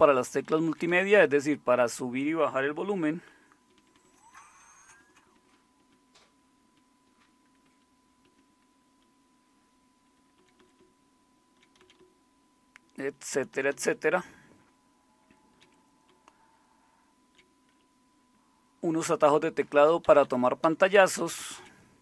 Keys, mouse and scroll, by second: 0.1 Up, 0.3 Up, 0.8 Up, 0.9 Up, 5.8 typing, 7.6 typing, 10.3-11.6 typing, 11.4-13.1 Down, 13.5 Down, 13.9-15.5 Down, 16.1-17.2 Down, 17.8 Up, 18.4 Up, 18.6 Up, 20.2 Up, 20.6 Down, 20.8 Down, 21.0 Down, 21.2 Down, 21.4 Down, 21.5 Down.